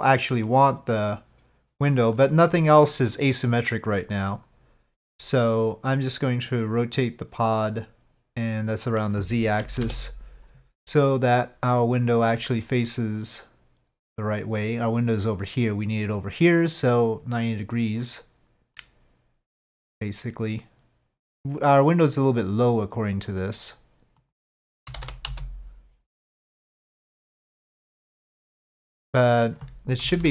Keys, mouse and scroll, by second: 8.4-9.0 middle drag, 9.6 KP_5, 9.8 KP_7, 18.7-23.3 drag, 24.3-25.5 drag, 26.3 click, 26.4-29.4 middle drag, 30.0 KP_5, 30.1 KP_1.